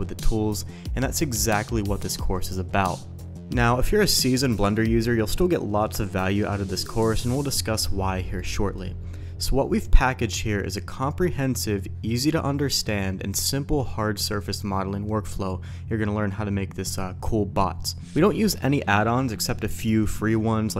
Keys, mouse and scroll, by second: 0.9-3.1 typing, 1.4 click, 1.6 Tab, 2.5 shift+click, 3.2 Tab, 3.3 middle click, 3.6 shift+drag, 4.4 click, 4.9-6.8 drag, 6.8 ctrl+shift+b, 9.7 g, 9.7 KP_5, 10.1 r, 11.3 ctrl+KP_Add, 11.8 p, 12.1 Tab, 18.0-19.3 typing, 19.0 middle click, 19.4 shift+click, 20.0 ctrl+a, 20.0 Tab, 20.4 Tab, 20.4 s, 20.4 z.